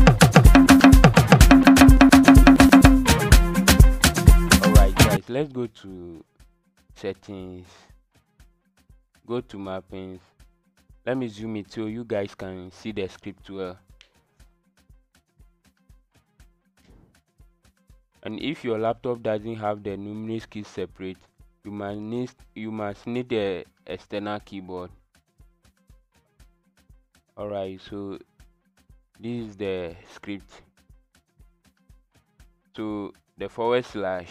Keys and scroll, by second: 0.0 KP_2, 0.6 KP_5, 2.2 KP_5.